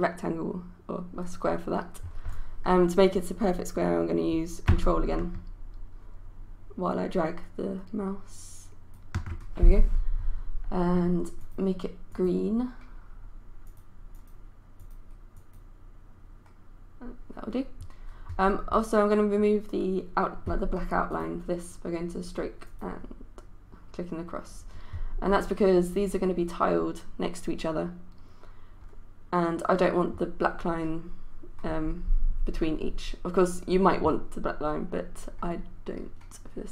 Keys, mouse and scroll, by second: 11.4-36.7 drag.